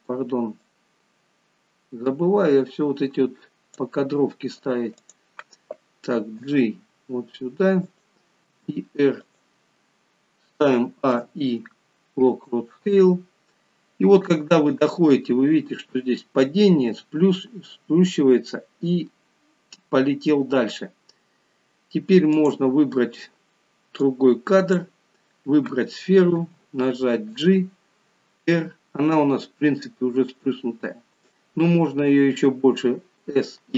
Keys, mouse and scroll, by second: 0.8 click, 5.1 click, 6.4 g, 11.0 a, 22.4 click, 24.2 click, 26.4 g.